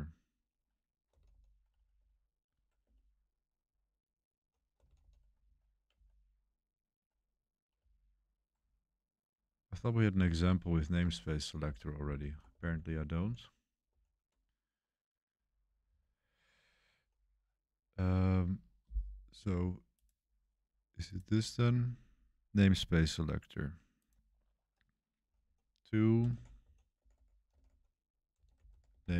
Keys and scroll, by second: 0.0-1.6 typing, 2.8-5.4 typing, 6.9 Page_Down, 7.7 Page_Up, 8.5 Page_Down, 9.3 Page_Up, 10.3 Page_Down, 10.9 Home, 11.6 Escape, 11.9-13.8 typing, 15.2-17.3 typing, 25.2-29.1 typing.